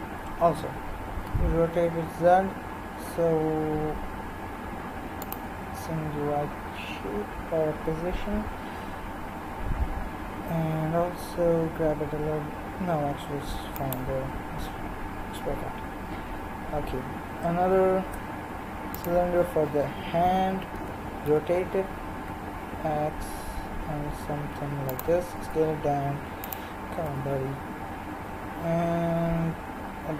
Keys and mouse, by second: 1.2 r, 10.4 g, 17.7 shift+a, 19.3-20.8 drag, 20.8 r, 25.4 s, 27.1 g.